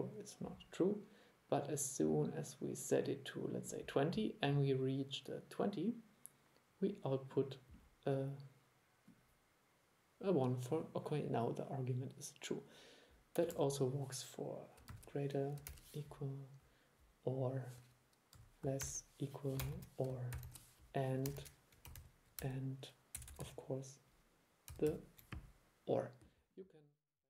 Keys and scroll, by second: 13.6 super+1, 22.0 alt+7, 22.1 alt+7, 24.8 alt+7.